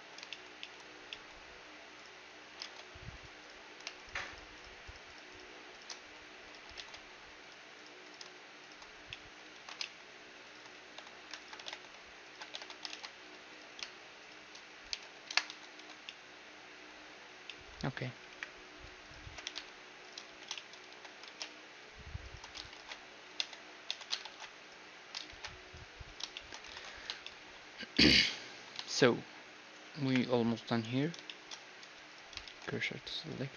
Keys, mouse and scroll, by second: 2.0-3.3 drag, 2.7 ctrl+Tab, 3.3-6.1 right drag, 6.0 x, 6.1-7.5 drag, 6.8 ctrl+Tab, 7.8-10.4 right drag, 9.1-12.2 drag, 9.6 ctrl+z, 10.8-16.1 right drag, 10.8-12.5 typing, 13.0 ctrl+Tab, 15.0 j, 15.3 KP_Decimal, 15.5 a, 15.8 Tab, 15.8-18.8 middle drag, 18.3-21.1 typing, 19.1-20.9 right drag, 20.5 middle click, 22.8 ctrl+alt+shift+c, 23.4 Tab, 23.9 Tab, 24.3 ctrl+alt+shift+c, 25.3 ctrl+alt+shift+c, 26.0 middle click, 26.4-31.0 middle drag, 26.8 ctrl+s, 30.1 KP_1, 31.0-33.5 right drag, 31.3-33.5 middle drag, 32.5 shift+s.